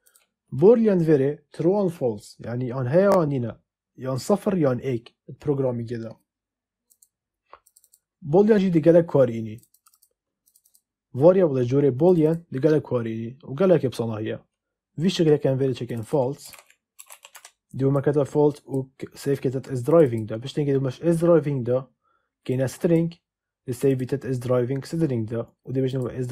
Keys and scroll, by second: 16.1-17.7 typing.